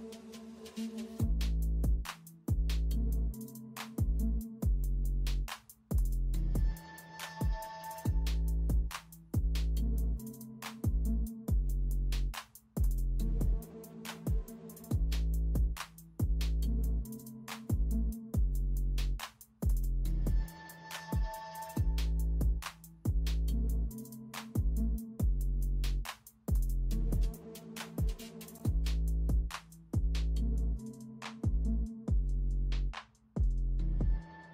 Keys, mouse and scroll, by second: 0.0 Return, 0.7 ctrl+alt+z, 5.8-7.5 typing, 7.6 ctrl+alt+z, 8.8 ctrl+alt+z, 8.9 r, 9.2 space, 10.2 ctrl+alt+z, 11.4 r, 11.7 space, 12.9 space, 15.7 space, 16.5 ctrl+alt+z, 18.2 typing, 19.2 ctrl+alt+z, 19.5 typing, 20.7-22.3 typing, 23.9 typing, 25.2 typing, 26.5 typing, 30.8 space, 32.8 space, 33.3 ctrl+alt+z, 34.2 space.